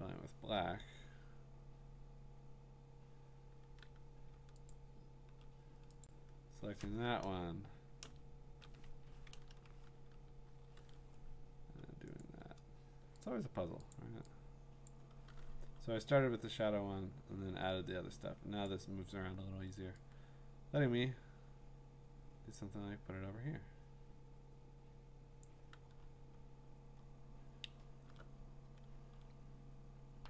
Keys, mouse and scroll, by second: 4.7-8.8 ctrl+drag, 8.0 BackSpace, 8.8 Escape, 9.3 ctrl+BackSpace, 10.7 ctrl+d, 12.2 click, 13.2 click, 13.9 click, 14.9 click, 15.6 v, 18.6 click, 19.0-21.7 drag, 25.4 click, 26.0-26.8 scroll down 7, 26.8 scroll up 3, 27.2 scroll, 27.3 scroll up 6, 27.6 scroll down 2, 29.8 scroll.